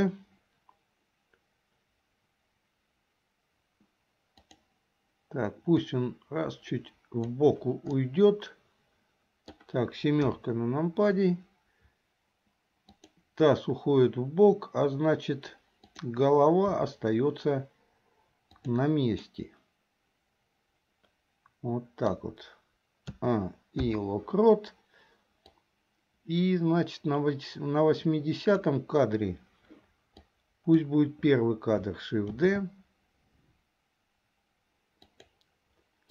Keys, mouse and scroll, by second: 4.4 click, 5.9-7.5 drag, 8.1-9.7 middle drag, 11.0 KP_7, 12.9 click, 15.9 click, 16.9 r, 19.4-22.3 middle drag, 23.2 a, 24.0 i, 25.7-28.8 drag, 30.3-30.9 drag, 32.6 shift+d.